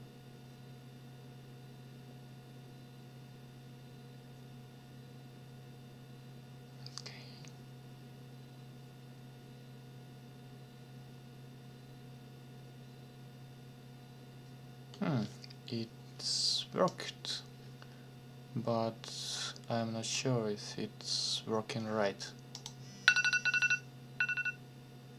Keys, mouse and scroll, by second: 16.9-20.3 drag, 22.5 click.